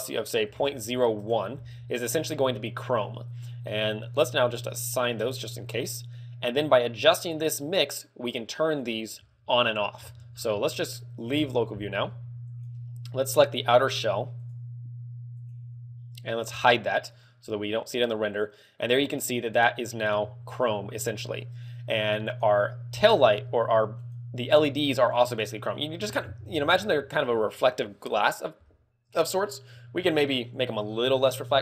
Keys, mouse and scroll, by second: 1.9 scroll up 3, 2.4 middle click, 3.0 middle click, 4.8 click, 5.4 click, 9.7 Tab, 9.9-10.8 scroll down 5, 10.8 middle click, 11.3 KP_Divide, 12.8 right click, 13.6 right click, 14.9 right click, 15.6 right click, 16.6 h, 17.5 scroll up 1, 18.2 scroll up 2, 19.0 shift+middle click, 20.0 ctrl+middle click, 22.6 right click, 24.3 right click, 24.6 z, 25.8 right click, 25.9 z, 30.4 ctrl+click.